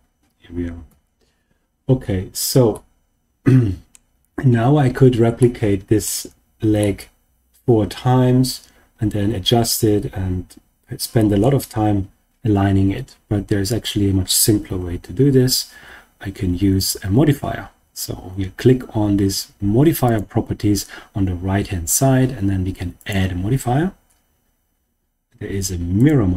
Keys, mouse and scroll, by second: 0.8 KP_3, 1.7-2.5 scroll down 2, 2.7-3.9 middle drag, 4.4-4.8 scroll up 4, 5.3 shift+middle click, 6.7-11.3 middle drag, 14.7 Tab, 20.0 click, 22.9-26.0 drag.